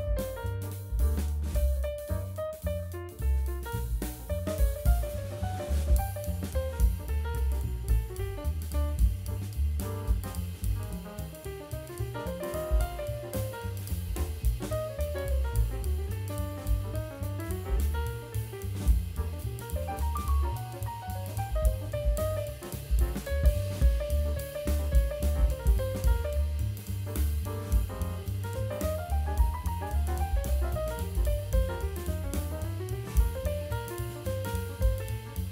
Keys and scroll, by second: 1.5 shift+b, 2.2 e, 4.2 4, 5.6 m, 7.6 ctrl+a, 16.0 Escape, 29.8 BackSpace, 30.3 space, 32.3 BackSpace, 32.7 Right, 33.6 BackSpace, 35.0 Escape.